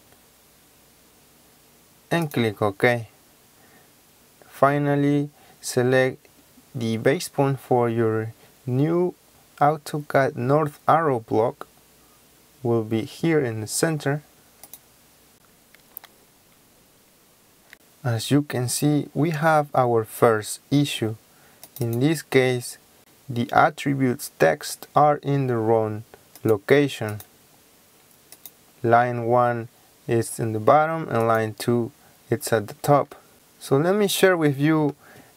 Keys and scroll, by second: 17.6 Escape, 17.7 Escape, 32.9 Escape.